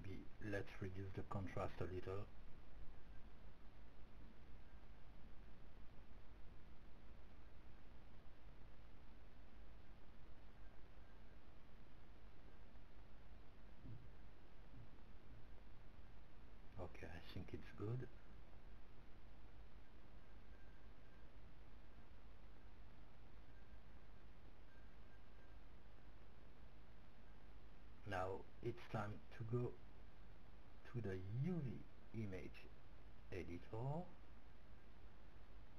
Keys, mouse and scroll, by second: 11.9-13.9 drag, 17.3-19.6 middle drag, 22.6-27.0 middle drag, 28.1-30.2 drag, 32.1-34.2 drag, 35.6 click.